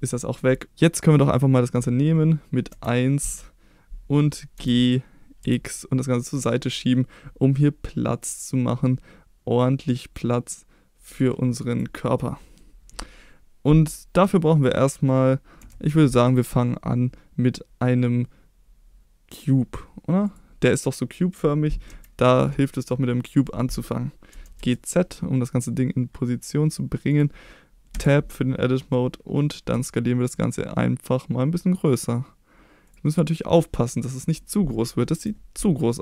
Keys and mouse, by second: 0.1 middle drag, 1.2 click, 2.7 KP_1, 4.5 g, 5.4 x, 11.1 click, 11.7 click, 12.0-12.6 middle drag, 15.7 shift+a, 20.7-21.3 middle drag, 21.8 KP_1, 24.3 g, 24.5 z, 27.1 click, 27.9 Tab, 29.7 s, 32.8 click, 33.0-34.1 middle drag, 35.1 KP_3.